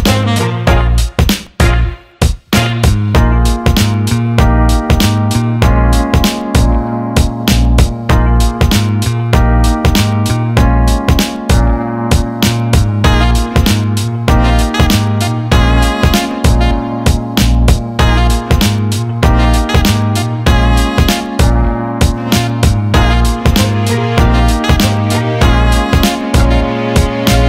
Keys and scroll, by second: 0.1 Up, 0.3 Right, 0.9 Left, 4.2 s.